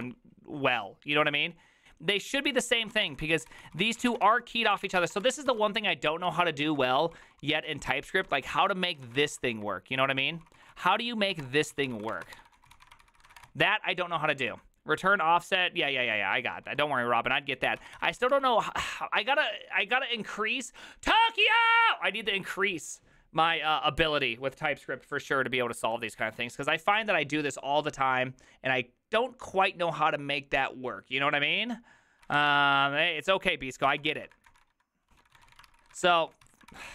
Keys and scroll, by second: 0.0-0.4 typing, 2.7-14.5 typing, 17.6-18.8 typing, 32.1-36.9 typing.